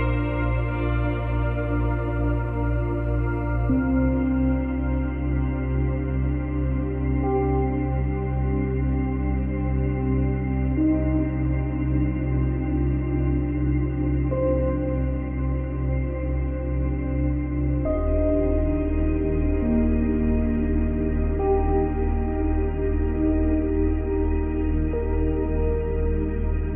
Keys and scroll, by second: 4.5 space, 10.7 space, 16.2 space, 18.4 space, 19.4 ctrl+c, 19.5 ctrl+v.